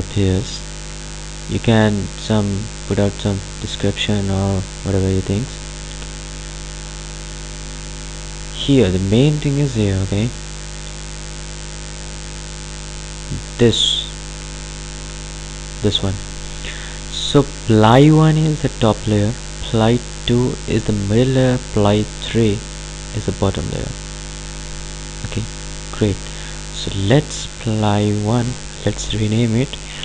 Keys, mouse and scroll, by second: 11.4-14.6 drag, 18.6 click, 26.1 click.